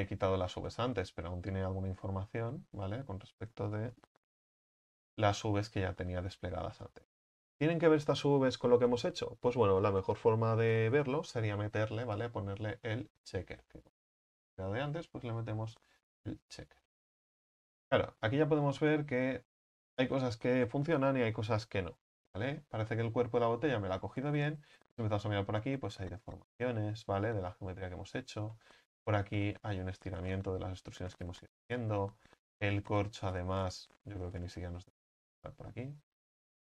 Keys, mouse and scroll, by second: 0.5-0.8 scroll up 3, 0.8 a, 1.1 a, 1.9 Tab, 2.7 Tab, 4.0 alt+h, 6.2 Tab, 6.6 Tab, 16.4-17.6 drag, 17.6 scroll down 2, 17.8 Tab, 18.6-19.0 middle drag, 19.0-19.5 scroll up 6, 22.5-23.0 scroll down 2, 23.1-24.7 middle drag, 24.7-25.6 scroll up 5, 25.6-26.2 scroll up 1, 26.2 scroll down 1, 27.5-32.3 middle drag, 32.3-33.1 scroll up 5, 34.1 Tab, 34.5-35.5 scroll down 16.